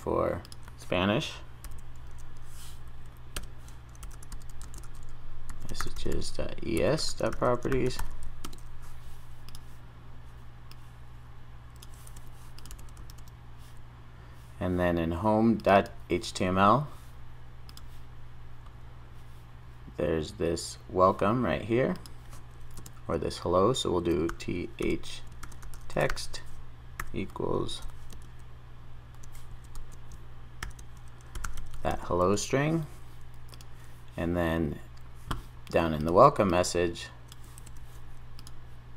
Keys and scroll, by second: 1.6 super+s, 1.7 super+n, 12.7 super+v, 32.3 super+s.